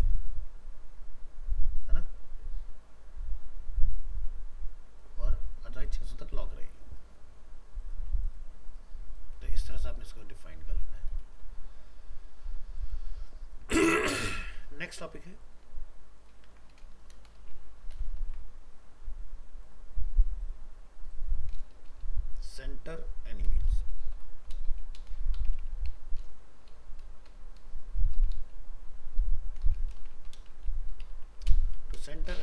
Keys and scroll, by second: 9.6 ctrl+w, 16.5 ctrl+c, 17.9 ctrl+v.